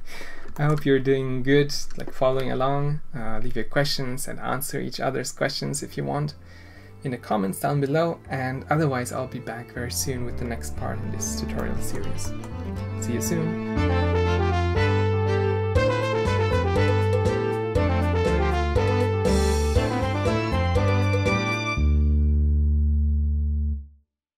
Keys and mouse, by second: 0.5 shift+click, 11.5 click, 12.2 click.